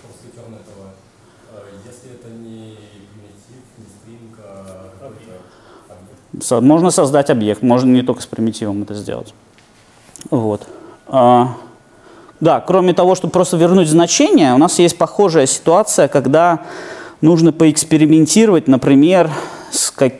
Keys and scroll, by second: 19.1 super+F8.